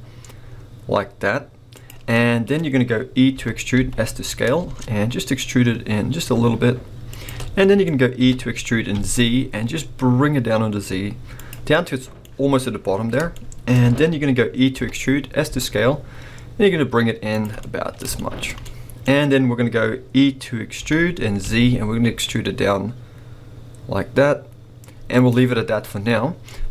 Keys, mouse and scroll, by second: 1.9 click, 2.1 middle click, 2.7-3.2 scroll up 2, 3.3 e, 7.2 shift+click, 7.6 middle click, 8.1 e, 11.5 click, 11.8 middle click, 13.3 shift+middle click, 14.7 e, 17.4 click, 17.6 middle click, 18.2-20.8 shift+middle drag, 20.8 e, 25.3 click, 25.7-26.4 scroll down 2, 26.4 middle click.